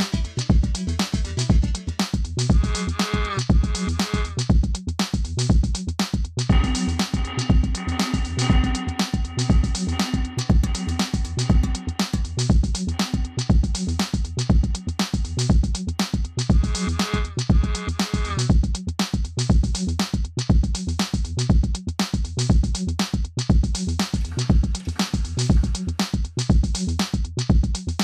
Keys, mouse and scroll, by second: 8.6 click, 11.7 click, 18.2 click, 21.5-22.5 typing, 23.0 Return, 25.0 scroll down 1, 25.8 scroll up 1, 26.0 scroll down 1, 26.6 scroll up 1, 26.8 scroll down 1, 27.3 scroll down 1, 27.6 scroll down 1.